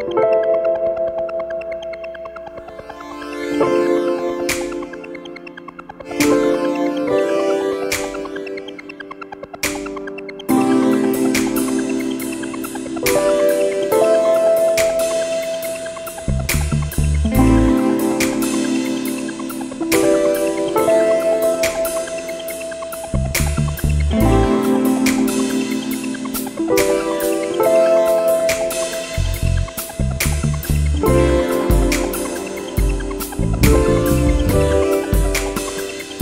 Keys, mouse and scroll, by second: 0.4 click, 2.0 click, 4.8 scroll down 2, 5.5-6.3 scroll down 6, 9.0 click, 11.0 click, 14.5 click, 18.4 click, 20.7 click, 23.8-24.1 scroll up 2, 24.6 scroll up 2, 25.3 scroll down 1, 26.1 scroll up 1, 26.7 scroll down 2, 28.4 click, 29.9 click, 35.8 click.